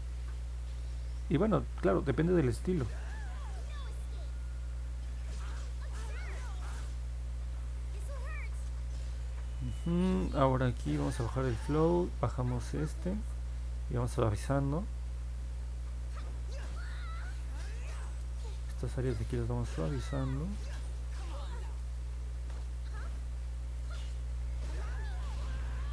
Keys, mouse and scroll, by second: 0.7 click, 1.6 click, 2.3 click, 2.9 click, 3.4 click, 4.0 click, 4.5 click, 5.1 click, 5.8 click, 6.4 click, 7.1 click, 14.2 click, 14.7 click, 15.3 click, 15.7 click, 16.2 click, 17.0 click, 17.3 click, 17.7 click, 18.1 click, 18.6 click, 19.1 click, 19.5 click, 19.9 click, 20.9 click, 21.2 click, 21.6 click, 22.1 click, 22.6 click, 23.1 click, 23.7 click, 25.1 middle click, 25.1-25.9 scroll down 3, 25.5 middle click, 25.8 middle click.